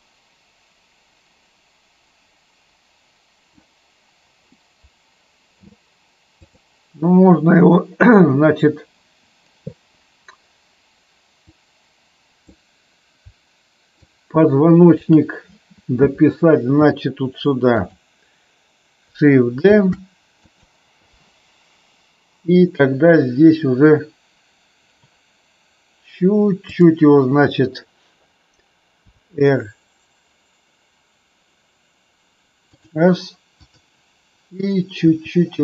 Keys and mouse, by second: 6.3 click, 11.4-12.5 drag, 13.9-15.0 shift+drag, 17.6 click, 19.6 shift+d, 20.4 click, 26.8-27.3 drag, 29.0 r, 32.6 click, 33.6 click, 34.9 r.